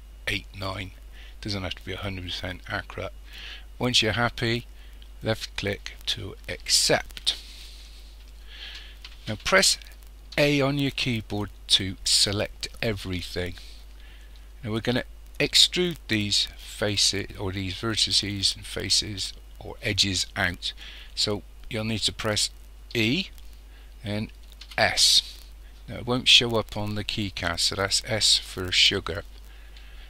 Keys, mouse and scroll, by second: 5.4 click, 10.4 a, 23.0 e.